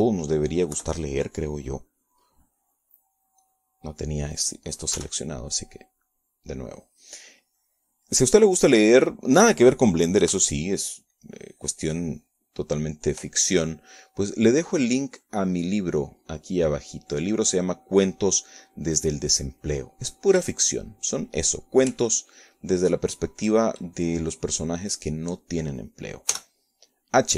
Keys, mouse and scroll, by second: 0.9 b, 2.3-4.1 drag, 6.3 b, 7.1-8.5 drag, 8.5-20.9 middle drag, 22.3 h, 25.6 click, 26.1 click, 27.2 click.